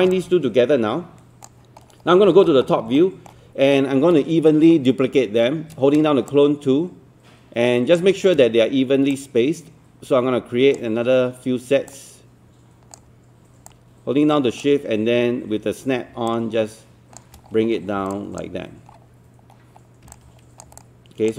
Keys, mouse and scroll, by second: 0.2 click, 2.1 scroll up 1, 3.0 alt+middle click, 6.3-8.0 shift+drag, 9.1-10.8 shift+drag, 11.9 shift+click, 13.7 shift+click, 16.3 shift+click, 17.5 scroll down 1, 18.1 alt+click, 18.9 scroll down 1, 19.8-20.1 scroll up 1, 20.1 click, 20.8 alt+click.